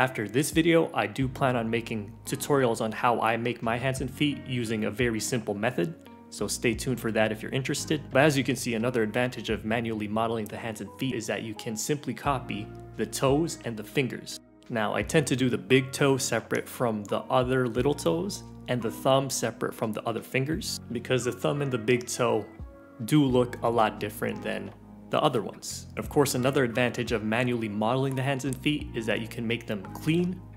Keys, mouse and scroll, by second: 0.0-2.4 typing, 0.1 middle click, 0.3 ctrl+l, 0.5 click, 1.2 right click, 1.2 middle click, 1.2 scroll up 2, 1.3 right click, 1.3 middle click, 1.4 click, 1.4 right click, 1.4 middle click, 1.5 click, 1.5 right click, 1.5 middle click, 1.6 shift+middle click, 1.7 click, 1.8 right click, 1.8 middle click, 2.1 shift+click, 2.2 click, 2.4 middle click, 2.6 right click, 2.8 scroll up 4, 2.9 scroll down 7, 2.9 scroll up 6, 3.0 scroll down 1, 3.1 Tab, 3.1 Tab, 3.2 Tab, 3.3 right click, 3.4 a, 3.6 click, 3.7 right click, 3.8 middle click, 4.0 scroll down 1, 4.2 middle click, 4.3 scroll up 2, 4.3 click, 4.3 middle click, 4.4 Tab, 4.5 click, 4.7 Delete, 4.8 middle click, 4.8 scroll down 2, 4.9 ctrl+l, 5.0-11.0 typing, 5.1 click, 5.4 scroll up 1, 6.0 middle click, 6.1 shift+click, 6.7 right click, 6.7 middle click, 6.8-7.2 scroll down 4, 6.8 right click, 6.8 middle click, 7.1 Delete, 7.2 click, 7.2 ctrl+l, 8.0 click, 8.1 middle click, 8.2 ctrl+z, 8.3 middle click, 8.5 scroll up 2, 8.5 middle click, 8.8 click, 8.9 middle click, 9.1 right click, 9.2 Delete, 9.2 scroll down 1, 9.2 right click, 9.4 ctrl+l, 9.4 click, 9.9-10.6 scroll up 3, 10.1 click, 10.3 middle click, 10.5 shift+middle click, 10.6 middle click, 10.7 click, 10.9 shift+click, 11.1 middle click, 11.3 scroll up 2, 11.4 scroll down 2, 11.6 middle click, 11.8 middle click, 12.0 middle click, 12.2 ctrl+z, 12.4 middle click, 12.4 ctrl+z, 12.5 middle click, 12.6-13.8 typing, 12.7 middle click, 12.8 alt+shift+click, 12.8 middle click, 13.0 ctrl+l, 13.2 middle click, 13.7 shift+click, 14.0 scroll up 4, 14.1 shift+middle click, 14.1 Tab, 14.2 scroll down 7, 14.2 middle click, 14.4 middle click, 14.4 click, 14.6 middle click, 14.8 click, 14.9 ], 15.0 middle click, 15.0 click, 15.2 middle click, 15.2 click, 15.4 middle click, 15.5 click, 15.6 middle click, 15.6 middle click, 15.7 click, 15.8 middle click, 16.0 ctrl+z, 16.1 middle click, 16.4 click, 16.4 middle click, 16.5 click, 16.5 middle click, 16.5 click, 16.6 middle click, 16.6 click, 16.6 middle click, 16.7 click, 16.8 middle click, 16.9 click, 17.1 middle click, 17.2 click, 17.3-18.2 typing, 17.6 alt+click, 17.7 middle click, 17.8 click, 17.9 scroll down 1, 18.1 middle click, 18.4 ctrl+r, 18.6 middle click, 18.9 alt+z, 19.1 middle click, 19.2 click, 19.3 g, 19.4 middle click, 19.5 alt+z, 19.6 middle click, 19.7 g, 19.8 click, 19.9 g, 20.0 Tab, 20.0 middle click, 20.0 scroll down 2, 20.1 Tab, 20.1 shift+middle click, 20.2 alt+z, 20.4 middle click, 20.4 click, 20.5 scroll up 1, 20.5 shift+middle click, 20.7 middle click, 20.8 alt+z, 20.9 middle click, 21.0 click, 21.0 g, 21.1 Tab, 21.4 alt+z, 21.4 scroll up 3, 21.4 middle click, 21.5 middle click, 21.7 click, 21.9 click, 22.2 click, 22.4-25.8 typing, 22.6 click, 23.1 middle click, 23.3 middle click, 23.3 ctrl+z, 23.5 middle click, 23.6 click, 24.0 middle click, 24.2 middle click, 24.3 middle click, 24.4 click, 24.5 ctrl+z, 24.5 ctrl+z, 24.5 middle click, 24.6 ctrl+z, 24.6 middle click, 24.7 click, 24.9 click, 25.1 scroll down 2, 25.1 middle click, 25.6 middle click, 25.7 click, 26.0 middle click, 26.3 middle click, 26.7 click, 26.9-29.8 typing, 27.0 click, 27.5 middle click, 27.6 click, 27.7 middle click, 27.9 middle click, 28.0 middle click, 28.1 click, 28.2 click, 28.5 middle click, 28.7 middle click, 29.1 shift+click, 29.1 shift+click, 29.1 middle click, 29.3 click, 29.4 click, 29.7 ctrl+z, 29.7 click, 30.1 middle click, 30.2 scroll down 2, 30.2 alt+z, 30.2 middle click, 30.4 middle click, 30.4 click, 30.5 middle click, 30.5 click.